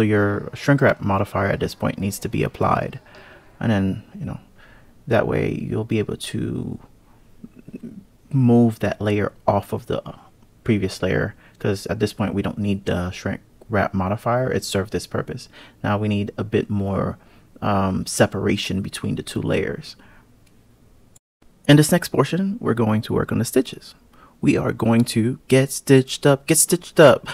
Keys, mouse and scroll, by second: 0.3 KP_3, 0.5 ctrl+z, 1.1 ctrl+z, 1.6 click, 2.0 click, 3.5 alt+z, 4.5 click, 6.9 KP_3, 8.4 click, 9.8 g, 16.6 click, 19.2 click, 24.4-25.0 scroll down 1, 25.0-27.3 scroll down 2.